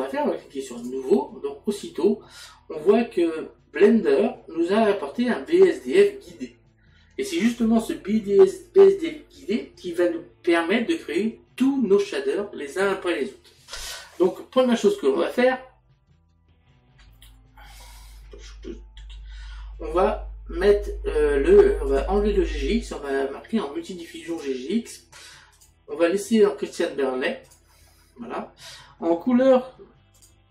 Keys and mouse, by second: 0.8 click, 2.2 middle click, 5.5 click, 21.9 click, 25.5 click, 27.4 click, 30.2 click.